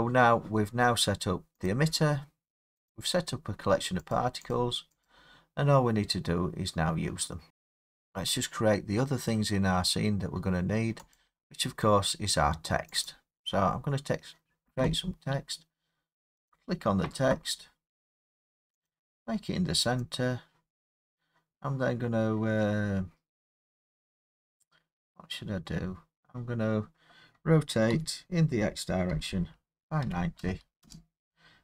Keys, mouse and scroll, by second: 1.7 click, 2.9 click, 4.2 click, 4.5 click, 5.1 click, 11.2 click, 13.1 click, 16.5 click, 18.9 click, 20.0 click, 22.7 middle click, 22.7 middle click, 22.8-23.5 middle click, 23.4 middle click, 29.1 x, 30.8 Return.